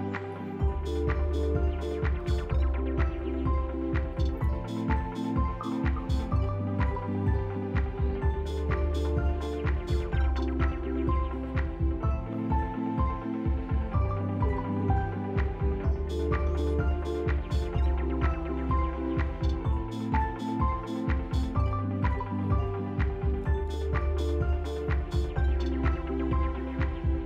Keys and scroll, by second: 0.9 r, 1.1 ctrl+z, 1.9 s, 3.0 ctrl+z, 3.5 s, 4.8 ctrl+z, 6.4 shift+r, 7.0 s, 9.2 s, 13.4 s, 19.1 F4, 20.5 s, 22.0 ctrl+z, 24.5 shift+r, 25.6 s, 26.4 s.